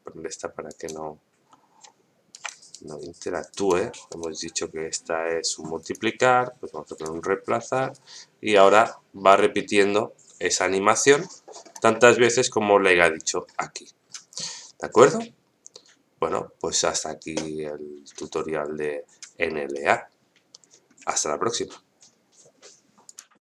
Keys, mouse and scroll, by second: 2.3 shift+right click, 2.8 right click, 4.1 right click, 5.8-7.0 drag, 7.9-11.7 drag.